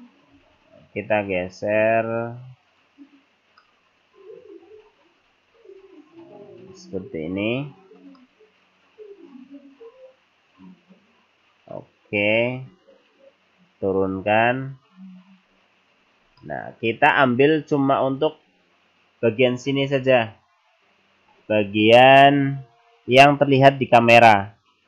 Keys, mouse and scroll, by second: 0.4 g, 3.6 middle click, 4.8 scroll down 2, 5.0 scroll up 3, 5.7 click, 8.2 middle click, 10.7 click, 14.0 click, 16.5 middle click.